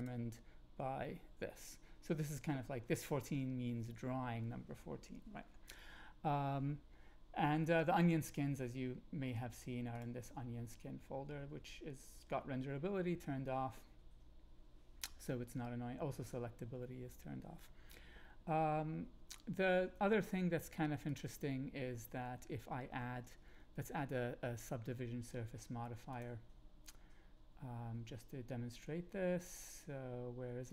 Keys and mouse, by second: 0.0 click, 21.0 click, 23.0 shift+a, 26.1-30.7 drag.